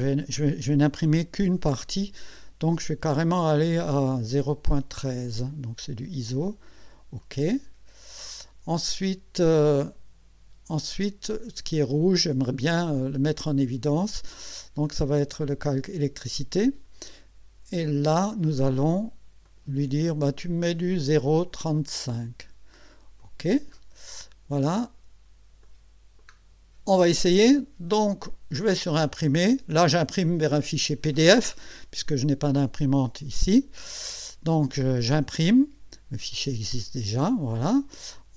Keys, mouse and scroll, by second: 5.5 click, 7.2 click, 8.3-8.7 scroll up 1, 9.1 scroll down 2, 9.8-10.9 middle drag, 16.5 click, 17.9 click, 19.4 click, 21.8 click, 23.2 click, 24.4-25.2 scroll down 2, 25.6 middle click, 29.0 click, 34.9 click, 36.7 click.